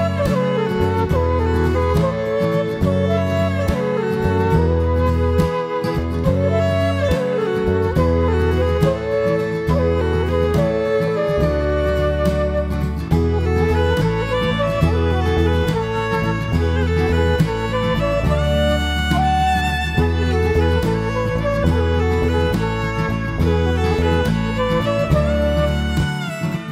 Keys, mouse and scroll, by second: 7.8 click, 8.9 click, 10.0 shift+click, 10.4 right click, 15.2 click, 15.5 click, 16.1 g, 16.7 click, 16.9 g, 18.8 click, 20.0 g, 20.5 click, 20.5 g, 22.3 Escape, 22.5 Escape, 22.5 KP_1, 23.4 g, 24.3 click, 24.9 g, 25.2 click, 25.3 g, 26.6 click.